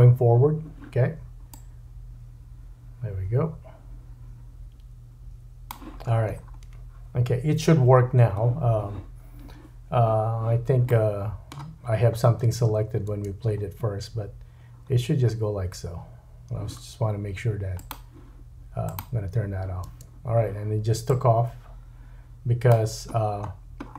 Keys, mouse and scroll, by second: 6.4-9.6 scroll down 2, 10.9 middle click, 13.1 space, 14.6-16.0 scroll down 3, 16.0-17.8 scroll down 1, 19.9 space, 23.2-23.9 scroll down 10.